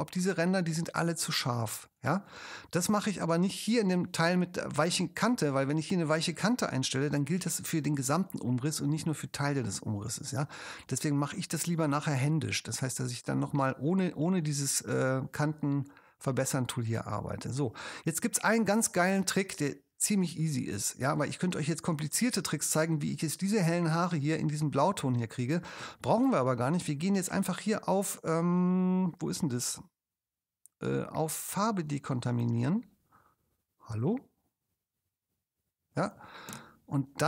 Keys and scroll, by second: 7.4 space, 19.4 super+space.